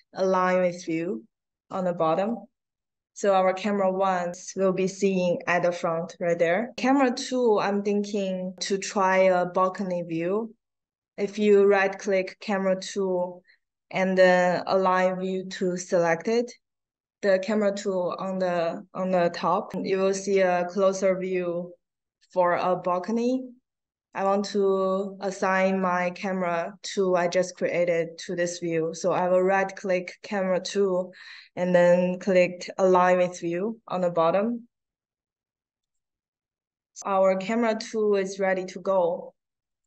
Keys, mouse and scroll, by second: 2.0 click, 9.6 right click, 11.4 right click, 24.0 right click, 35.7 click, 39.6 click.